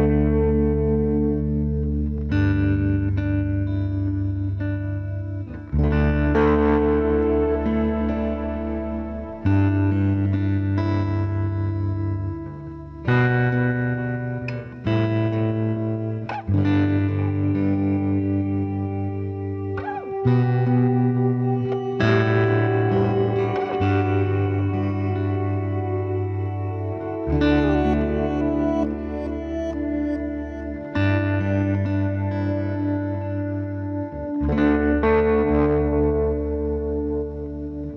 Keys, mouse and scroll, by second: 1.2 c, 2.5-4.3 drag, 4.8 r, 7.4-8.6 drag, 7.8 middle click, 7.8 right click, 9.3 click, 10.4-12.5 right drag, 11.1-13.0 drag, 13.0 middle click, 13.6-15.5 right drag, 14.2-16.0 drag, 16.0 middle click, 16.5 right click, 16.7 g, 17.7 g, 21.7 ctrl+r, 23.0-24.5 right drag, 23.7 KP_Decimal, 24.5 middle click, 24.7 click, 24.8 middle click, 25.0 c, 27.0 c, 28.3 s, 29.8 g, 31.7 ctrl+r, 32.8-35.4 right drag, 33.4 c, 34.7 g, 35.8 ctrl+s, 36.5 Tab, 37.0 z, 37.5 z.